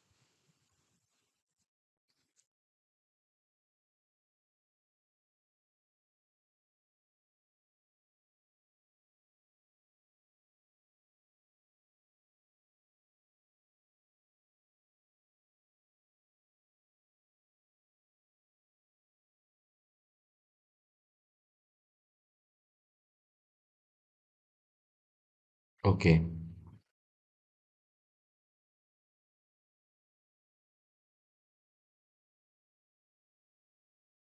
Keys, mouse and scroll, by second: 0.0-0.7 scroll down 2, 0.7-2.0 middle drag, 2.0 click, 2.5-3.0 scroll up 1, 3.0-4.6 scroll down 1, 4.6 KP_3, 5.7 drag, 6.8-8.0 middle drag, 8.0 shift+click, 9.1-10.0 scroll up 1, 10.0-10.9 scroll down 2, 10.9 shift+click, 12.5 drag, 13.4 KP_3, 14.3 drag, 16.3-18.1 middle drag, 18.1-19.8 scroll up 3, 19.8-20.2 scroll down 2, 20.2-21.9 middle drag, 21.9 shift+click, 23.7 shift+click, 24.9 shift+click, 26.0-28.2 middle drag, 28.2-30.0 scroll down 3, 30.0-31.6 middle drag, 31.6 shift+click, 33.5-34.2 middle drag.